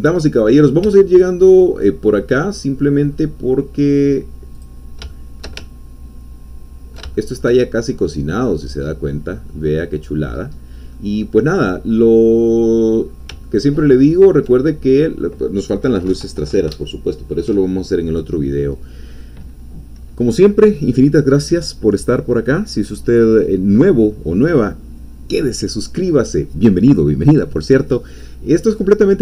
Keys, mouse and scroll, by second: 0.2 middle click, 0.2 scroll down 2, 0.8 Tab, 1.3 click, 2.0 middle click, 2.0-3.3 scroll down 2, 4.5 click, 5.1-8.9 shift+middle drag, 9.1 scroll down 1, 9.5-10.5 drag, 10.6 scroll down 1, 10.9-13.2 drag, 13.4-14.5 ctrl+drag.